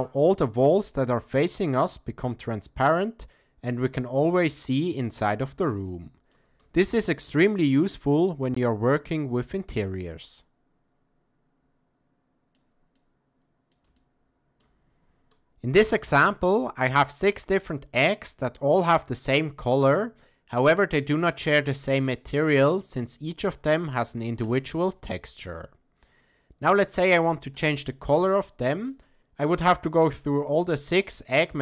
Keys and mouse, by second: 0.6-5.2 middle drag, 5.9-6.4 shift+middle drag, 6.8 ctrl+middle click, 7.8-12.6 middle drag, 13.0-13.7 middle drag, 14.0-14.6 shift+middle drag, 18.1 click, 19.7 click, 21.0 click, 24.4 click, 27.5 click.